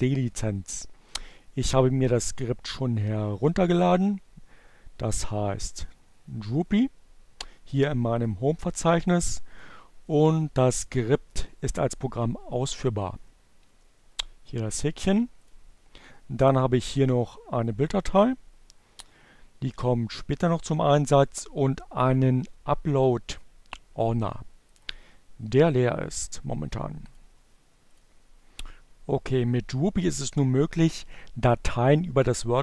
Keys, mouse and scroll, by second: 0.1 click, 1.9 click, 4.8 right click, 7.3-8.4 drag, 10.1 click, 15.3 click, 16.0 click, 16.9 click, 20.6 click, 23.1-25.0 drag, 25.7-27.2 drag, 27.8 click, 30.7 click.